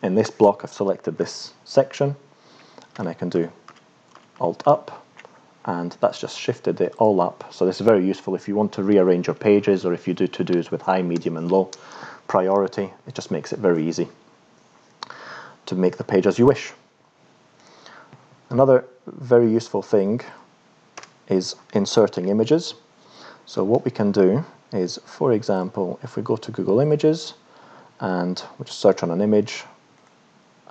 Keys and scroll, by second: 2.9 alt+Up, 3.7 alt+Up, 4.3 alt+Up, 21.0 Return.